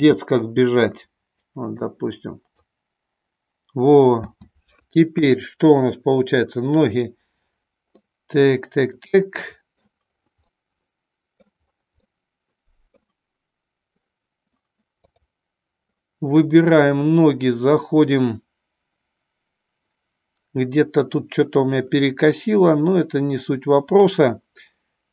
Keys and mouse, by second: 1.8-21.5 drag.